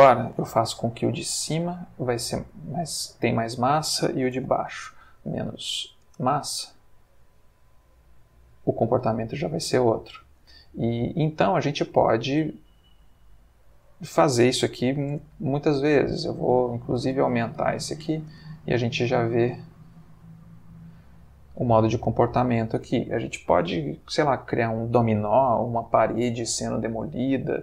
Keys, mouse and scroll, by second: 0.8 5, 1.2 Return, 2.5 click, 3.5 click, 4.3 1, 4.4 Return, 6.1 space, 8.5-9.3 middle drag, 10.0 Escape, 11.2-11.8 middle drag, 13.8 click, 15.1 Tab, 15.4 s, 16.3 click, 17.0 Tab, 17.6 g, 18.1 click, 18.3 space, 21.2-22.1 middle drag.